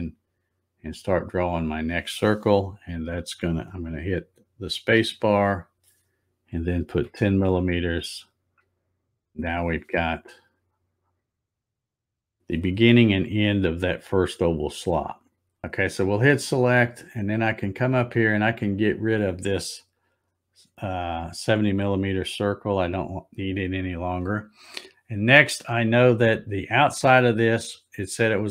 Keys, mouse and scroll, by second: 4.8 space, 10.1 scroll up 2, 10.7-12.2 scroll up 9, 15.2 scroll down 2, 16.4-16.8 scroll up 1, 18.7 click.